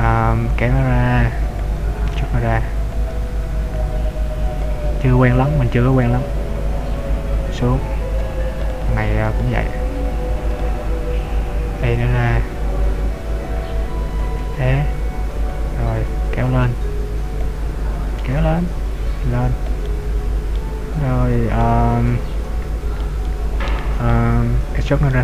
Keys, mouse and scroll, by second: 0.8 click, 1.9 ctrl+z, 2.1 r, 3.2 click, 3.3 ctrl+z, 3.5 e, 5.4 click, 6.9 click, 8.8 right click, 9.6 shift+right click, 10.8 right click, 11.8 e, 13.2 click, 14.6 e, 15.7 click, 16.7 click, 16.8 click, 18.2 click, 20.1 middle click, 21.3 scroll up 1, 21.7 middle click, 23.3 middle click, 24.3 scroll down 1.